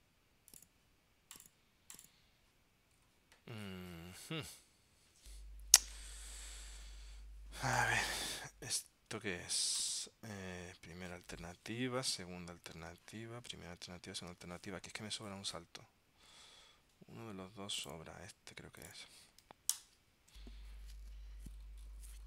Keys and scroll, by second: 12.9 super+Tab, 14.4 super+Tab.